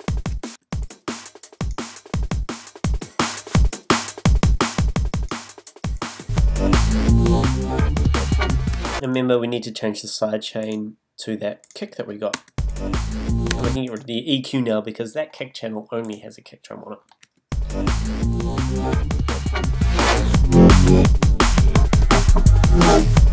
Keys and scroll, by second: 0.5 space, 8.7 space, 12.3 space, 13.5 space, 17.3 space.